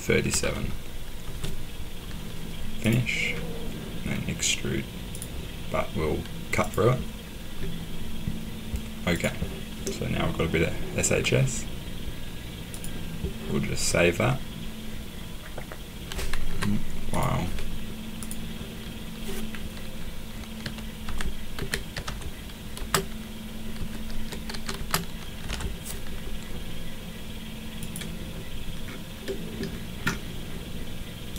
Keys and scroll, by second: 0.0-1.2 typing, 2.9-3.7 typing, 16.4 Escape, 20.6-26.0 typing.